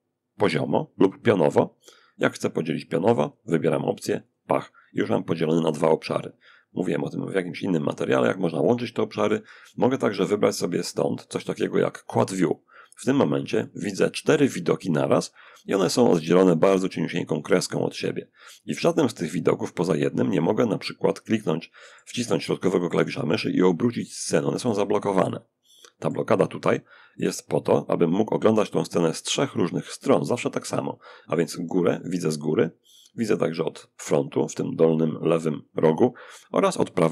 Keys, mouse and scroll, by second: 2.4 click, 3.4 click, 6.4-7.7 drag, 8.9 click, 11.6 click, 18.1-24.4 middle drag, 30.8-31.2 scroll up 1, 31.2-31.6 scroll down 1, 31.6-32.3 scroll up 2, 32.5-32.9 scroll down 2, 32.9-33.4 scroll up 2, 33.4-34.0 scroll down 2, 35.9-36.3 scroll down 2, 36.3-37.1 scroll up 2.